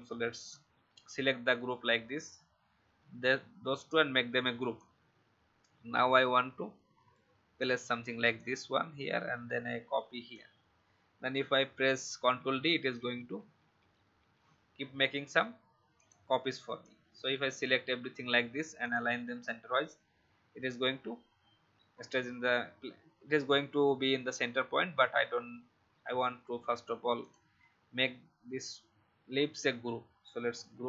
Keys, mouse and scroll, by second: 0.4 shift+click, 2.8 ctrl+g, 4.7-8.1 drag, 8.3-10.3 alt+drag, 11.8 ctrl+d, 12.0 ctrl+d, 12.2 ctrl+d, 12.5 ctrl+d, 12.8 ctrl+d, 13.0 ctrl+d, 13.6 ctrl+d, 14.2 ctrl+d, 15.1 ctrl+d, 15.9-18.4 drag, 27.1 shift+click, 30.5 ctrl+g.